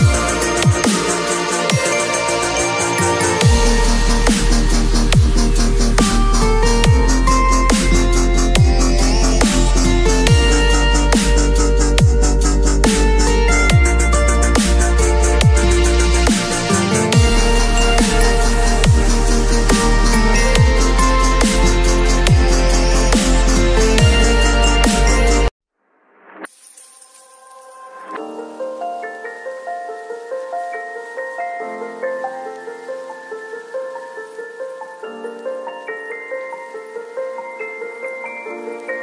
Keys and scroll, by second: 10.5 space, 17.8 ctrl+l, 23.9 Return, 27.5 ctrl+[, 28.2 b, 29.6 ], 34.7 [, 36.5 ].